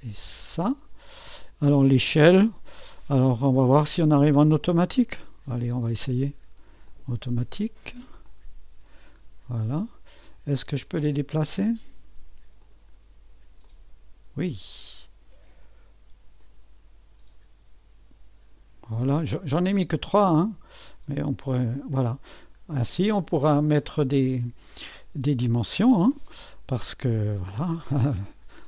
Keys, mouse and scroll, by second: 0.4 click, 5.5 click, 6.1 click, 6.9-9.3 drag, 9.3-12.0 scroll up 1, 12.6 click, 13.7-15.6 drag, 16.4-18.7 drag, 20.8-22.4 drag, 22.4-23.6 scroll up 1, 24.4-25.0 scroll up 1.